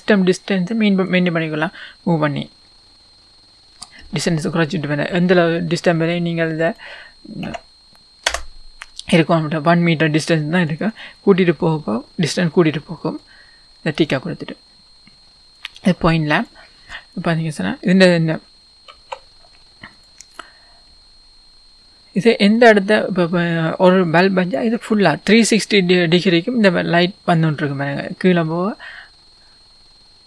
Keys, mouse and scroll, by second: 1.4-14.1 drag, 8.4 Return, 15.7 click, 17.2-18.9 scroll up 1, 19.0 s, 20.1 click, 21.8 right click, 22.7 click, 26.2-27.4 scroll down 1, 27.4 click.